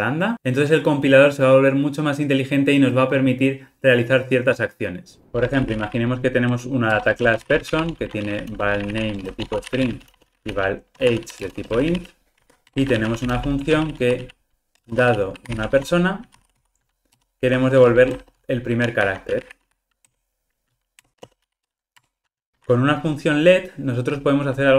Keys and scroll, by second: 7.0 Return, 12.6 Escape, 17.2 Return.